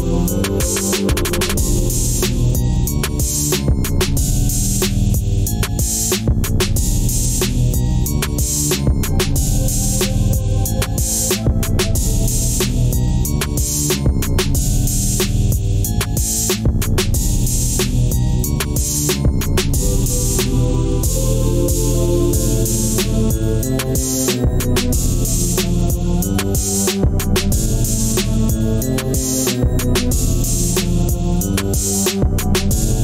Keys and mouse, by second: 3.1 drag, 8.6 drag, 15.9 Tab, 16.7-18.9 middle drag, 19.3 ctrl+s, 19.9 click, 20.1 Tab, 21.0-24.1 middle drag, 25.3-28.3 middle drag, 29.0 ctrl+r.